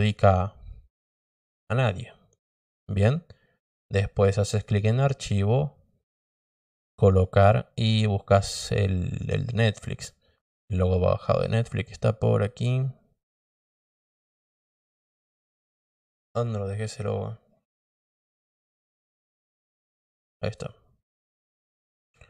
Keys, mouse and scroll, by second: 4.4 click, 6.3 click, 9.5 scroll up 1, 10.5 click, 16.7-17.1 scroll down 2, 18.0 click, 20.2 click, 20.4 click, 21.8 click.